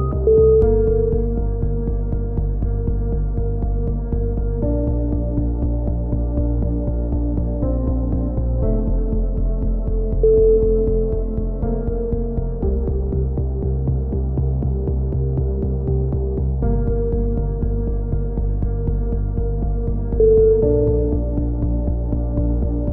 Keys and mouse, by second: 0.0 z, 2.8 click, 3.6 c, 3.9 right click, 4.1 click, 5.6 a, 5.7 z, 5.9 click, 7.9 KP_3, 8.1 z, 8.4 right click, 8.9-10.0 drag, 9.2 z, 11.2 click, 11.2-13.3 typing, 12.0 click, 14.2-15.9 drag, 15.9 right click, 16.7-19.2 drag, 18.6 z, 20.2 click, 20.5 right click, 20.8 KP_7, 20.9 z, 21.3 click, 22.2 click.